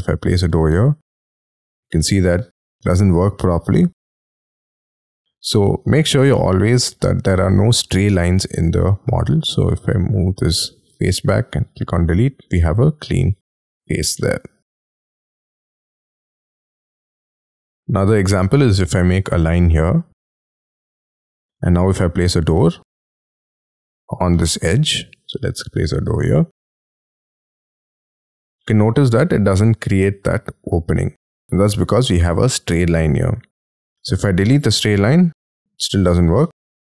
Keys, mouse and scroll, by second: 1.4 middle click, 2.0 space, 2.9 double click, 3.4 middle click, 5.1 ctrl+z, 5.6 middle click, 6.2-6.5 scroll up 5, 6.9 shift+middle click, 7.4-7.8 scroll up 6, 8.5 p, 10.5 e, 12.2-12.7 scroll down 7, 13.2 middle click, 13.9 scroll down 6, 14.5 j, 15.0 middle click, 16.6 shift+middle click, 16.9 shift+scroll down 3, 17.3 middle click, 17.9 middle click, 19.1-19.8 scroll up 6, 19.8 l, 21.6 middle click, 23.9-24.4 scroll up 6, 24.4 space, 24.7 scroll up 5, 25.0 middle click, 27.9 scroll up 4, 28.6 middle click, 29.1-29.6 scroll down 10, 29.7 middle click, 33.1-34.2 scroll up 9, 34.3 e, 35.1 scroll down 7, 35.5 middle click.